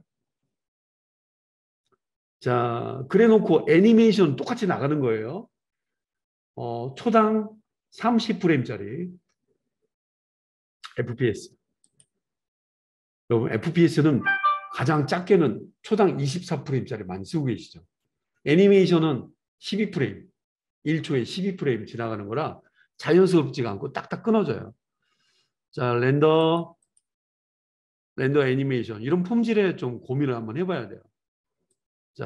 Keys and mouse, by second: 26.6 middle click, 30.2 click.